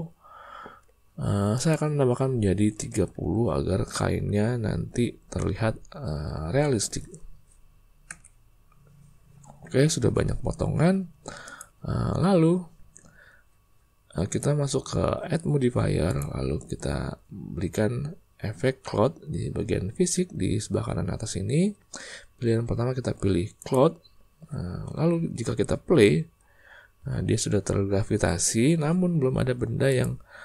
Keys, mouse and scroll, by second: 1.5-8.7 drag, 10.7 Tab, 11.4 click, 16.2-23.7 drag, 25.1 space, 26.9 space.